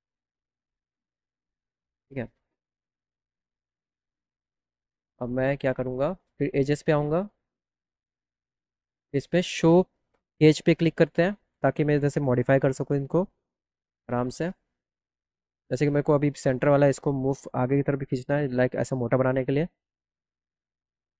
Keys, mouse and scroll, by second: 1.9 click, 5.5 click, 6.4 click, 10.4 click, 11.4 alt+middle click, 15.3 click, 18.2-21.1 drag.